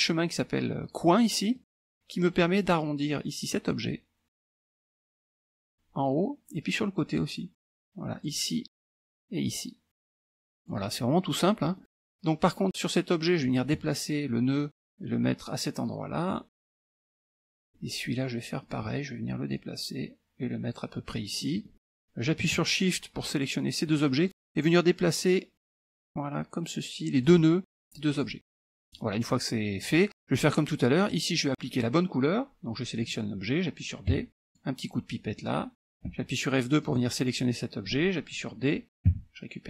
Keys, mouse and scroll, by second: 1.6 click, 3.6-6.0 drag, 7.2-8.7 drag, 9.5-11.1 drag, 11.7 middle click, 11.7 scroll down 1, 12.7 click, 13.3 middle click, 14.6-16.8 drag, 16.8 middle click, 17.6 middle click, 18.7 click, 19.6-21.5 drag, 21.5 middle click, 23.4 shift+click, 24.1 click, 25.8-27.6 drag, 28.3 click, 28.9 click, 30.4 click, 31.1 click, 34.2 d, 34.4 click, 36.2 F2, 36.9 click, 39.2 d.